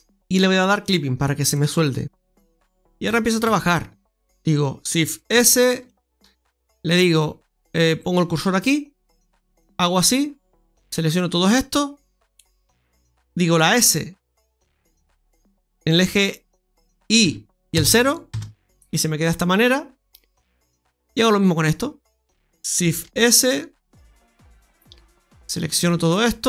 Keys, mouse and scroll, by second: 0.7 click, 1.3 click, 2.4 Tab, 3.0 shift+middle click, 3.4 Tab, 4.4 right click, 5.1 shift+s, 9.5 click, 13.6 s, 22.1 right click, 22.9 shift+s, 25.5 click.